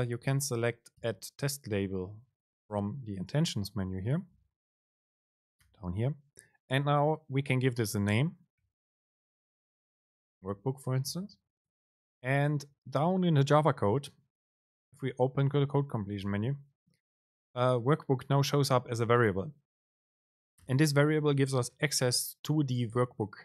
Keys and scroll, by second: 1.2 BackSpace, 1.9 Up, 14.8 Down, 14.8 super+space.